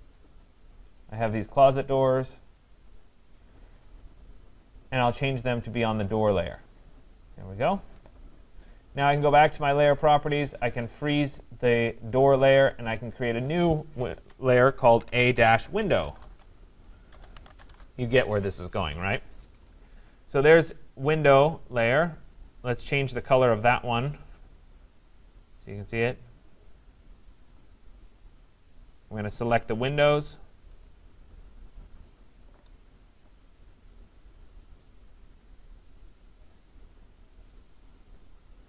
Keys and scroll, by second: 17.1 BackSpace.